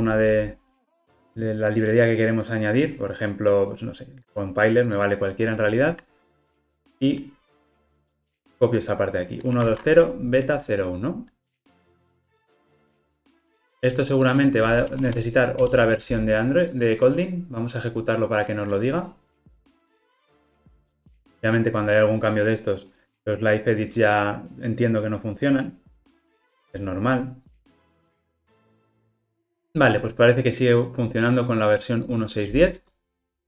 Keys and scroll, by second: 12.7 super+v, 27.8 ctrl+r.